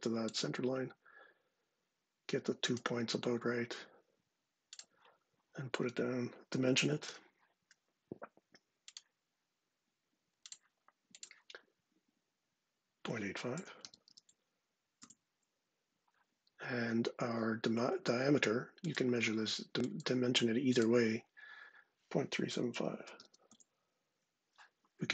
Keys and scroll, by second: 6.7 d, 13.0-14.2 typing, 14.7 Return, 21.9-23.3 typing.